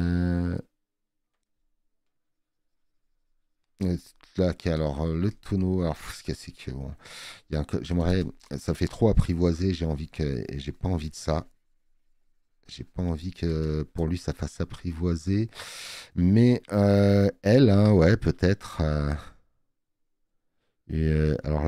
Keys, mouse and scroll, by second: 7.3 space, 7.5 click, 15.9 click, 17.2 scroll up 2.